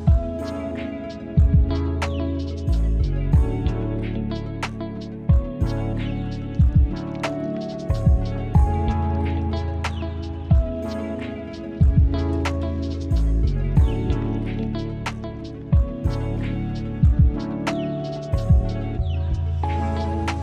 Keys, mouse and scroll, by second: 0.1 click, 0.3 `, 0.7 click, 1.2 click, 2.0 click, 2.2 scroll down 1, 2.4 s, 3.0 click, 3.4 click, 3.5-3.9 scroll up 4, 3.9-4.6 scroll down 1, 4.6 middle click, 5.7 scroll up 4, 5.8-6.2 middle drag, 6.2 scroll down 2, 6.3 middle click, 6.5 click, 6.7-7.2 middle drag, 7.2 shift+click, 7.4-9.0 middle drag, 9.8-10.2 middle drag, 10.2 `, 10.6-11.1 drag, 11.6 middle click, 12.4 click, 12.7 middle click, 13.0 `, 13.4 click, 14.7 middle click, 15.0 click, 15.3 middle click, 15.8 `, 16.1 click, 16.4-17.4 middle drag, 18.4 s, 18.8 click, 19.5-20.2 middle drag.